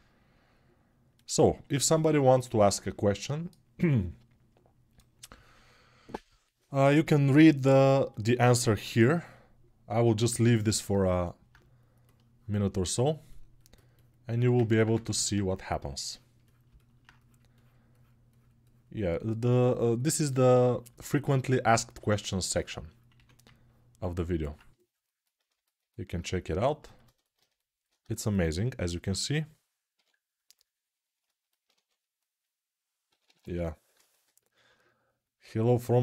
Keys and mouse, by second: 10.6 shift+r, 14.7 2.